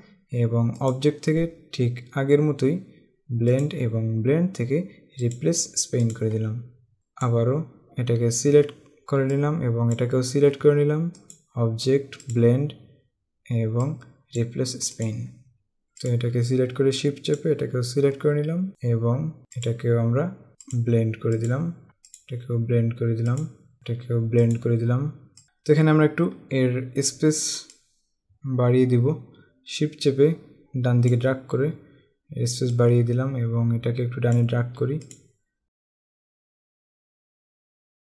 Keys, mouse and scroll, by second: 0.9 click, 3.6 click, 5.3 click, 9.4 click, 11.2 click, 14.0 click, 16.0 click, 18.7 click, 20.8 click, 22.1 click, 23.5 click, 24.5 click, 25.4 scroll down 1, 27.9 click, 32.9 click, 35.1 click, 36.0 scroll down 1, 36.3 click, 36.9 click, 37.3 click, 38.0 space.